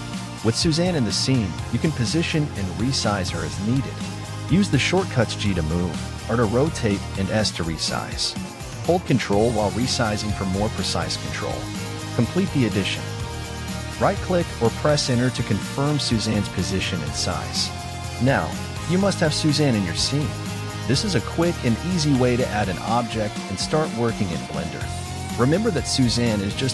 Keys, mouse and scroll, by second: 3.7 s, 7.0-10.0 middle drag, 10.4-13.4 scroll up 1, 13.8 g, 19.9 r.